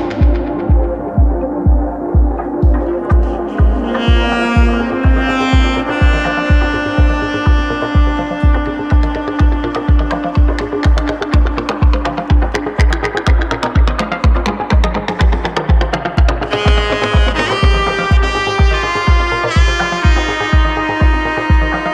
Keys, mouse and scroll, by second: 0.4-0.8 middle drag, 1.0 shift+middle drag, 3.3 click, 4.6-6.1 drag, 6.1 middle click, 7.3 ctrl+z, 7.6 middle click, 9.2-10.2 drag, 11.0 click, 12.9 alt+g, 13.5 click, 13.9-14.3 shift+drag, 14.8 click, 15.2 shift+click, 17.5 ctrl+s, 19.2 click.